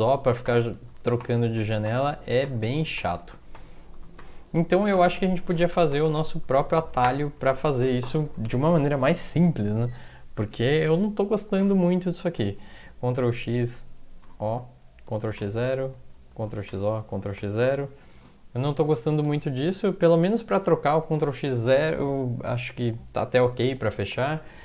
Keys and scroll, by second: 0.0-3.5 typing, 0.3 ctrl+x, 0.9 ctrl+x, 1.6 ctrl+x, 2.2 ctrl+x, 2.7 ctrl+x, 3.3 ctrl+x, 4.0 ctrl+x, 4.2 ctrl+o, 5.7 ctrl+x, 5.9-7.5 typing, 6.4 ctrl+x, 7.3 ctrl+x, 12.6 ctrl+x, 14.2 o, 15.1 ctrl+x, 15.4 0, 16.5 ctrl+x, 16.7 o, 17.1 ctrl+x, 17.4 0, 18.6 Up, 18.7 Up, 18.9 Up, 19.1 Up, 19.4 Down, 19.6 Down, 19.8 Down, 20.3 Up, 20.5 Up, 21.1 Down.